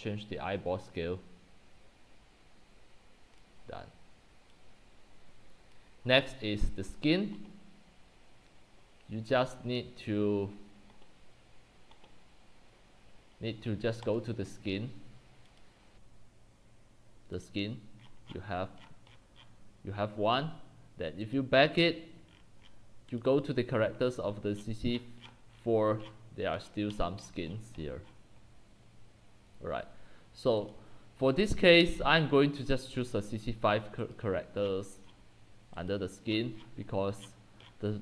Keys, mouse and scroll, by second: 2.1-6.0 drag, 6.0 scroll down 1, 6.2-11.1 middle drag, 6.2 scroll, 14.2 click, 18.0 middle click, 18.0-20.2 scroll, 21.2 scroll down 10, 21.3 click, 22.3-23.2 scroll, 23.4-24.5 drag, 24.5-28.0 scroll down 85, 28.0-28.5 scroll, 30.7-31.9 drag, 31.9-32.8 middle drag, 31.9-32.7 scroll, 32.8-34.6 drag, 34.6-37.2 scroll down 32, 35.9 click, 36.3-38.0 middle drag, 37.2-38.0 scroll down 18.